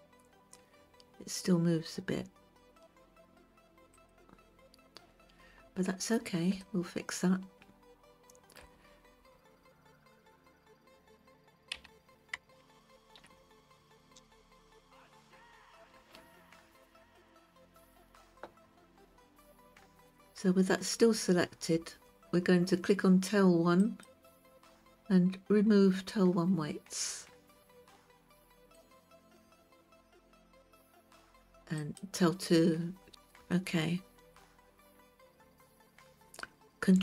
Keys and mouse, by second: 7.1-9.1 shift+middle drag, 12.3 a, 13.2 alt+r, 15.7 click, 17.8-18.6 drag, 24.3 click, 29.2 click, 32.3 click, 34.0 shift+middle click.